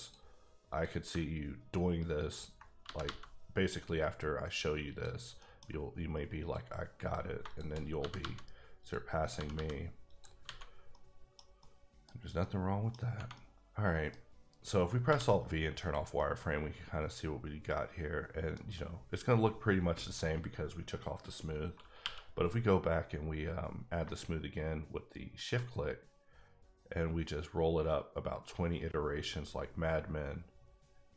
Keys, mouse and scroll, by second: 0.0 click, 0.8 click, 2.3 ctrl+click, 2.8 g, 3.0 g, 4.9 click, 5.4 middle click, 5.7 scroll up 1, 6.4 click, 7.4 shift+click, 8.0 g, 8.2 g, 8.8 click, 9.2 click, 9.3 g, 9.5 g, 10.1 click, 10.4 alt+a, 10.6 alt+scroll down 2, 10.9 middle click, 11.6 middle click, 12.4 middle click, 12.9 scroll down 3, 13.3 middle click, 14.3 scroll up 2, 15.1 alt+v, 15.8 click, 16.2 middle click, 22.0 q, 24.5 shift+q, 25.4 shift+click, 26.1-26.6 scroll up 3, 26.6-27.1 scroll up 13, 27.7-29.0 scroll down 4, 29.0-29.4 scroll down 2, 29.4-31.1 scroll up 4.